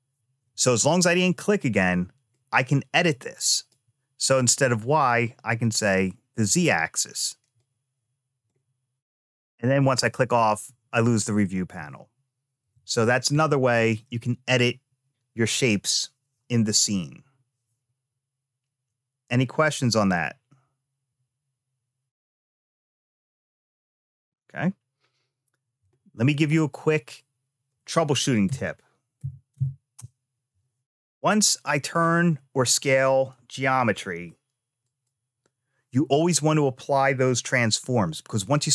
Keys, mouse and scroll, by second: 2.1-3.5 drag, 4.3-5.6 drag, 7.3-9.7 drag, 10.3-12.4 middle drag, 12.5 ctrl+z, 13.1 ctrl+z, 26.3 click, 28.2 r, 31.0 middle click, 33.1 s.